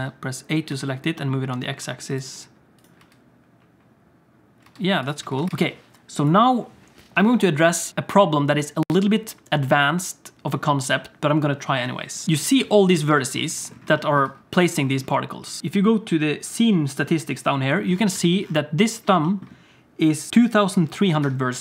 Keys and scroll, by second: 0.2 a, 0.8 g, 3.0 space, 4.7 space, 5.3 alt+shift+z, 12.2 alt+a, 12.2 ctrl+s, 14.2 Tab, 18.1 a, 21.2 Tab.